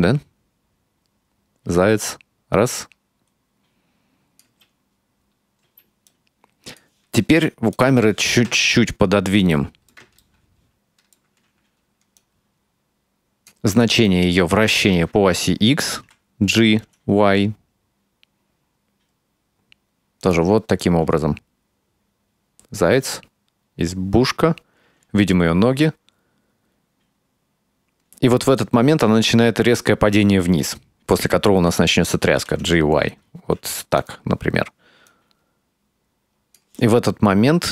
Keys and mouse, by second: 4.5 space, 5.7 space, 6.1-6.9 drag, 7.8 click, 8.6 ctrl+middle click, 9.6 shift+middle click, 10.9-13.6 drag, 13.8-14.3 right drag, 16.1 g, 20.9-31.0 drag, 32.3 g, 34.9-36.7 drag.